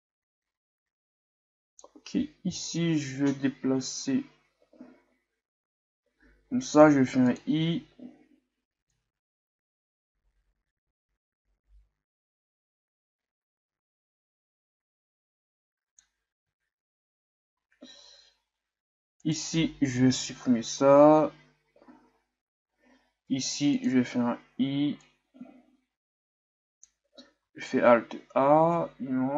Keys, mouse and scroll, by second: 3.1-5.3 shift+scroll down 2, 9.1-12.0 drag, 17.0-19.2 shift+scroll up 1, 19.2 right click, 20.3 Delete, 25.2-27.5 drag, 27.5 alt+a.